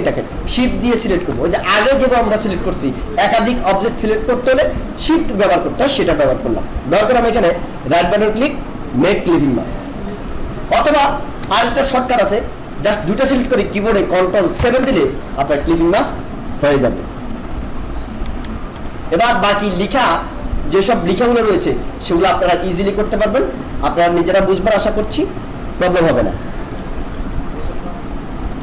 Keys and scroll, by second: 11.4 ctrl+z, 14.6 ctrl+7, 18.2 ctrl+-.